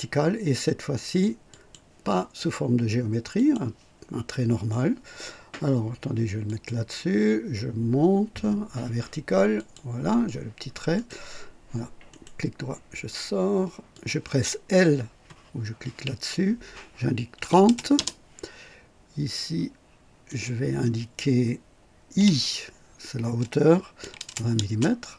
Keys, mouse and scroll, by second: 1.5 click, 3.3 click, 6.4 click, 9.5 click, 10.9 right click, 12.0 right click, 13.9 click, 15.9 typing, 17.3 KP_3, 17.6 KP_0, 17.9 Return, 20.2 click, 22.1 i, 23.9 KP_2, 24.2 KP_0, 24.5 Return, 24.6 KP_Decimal.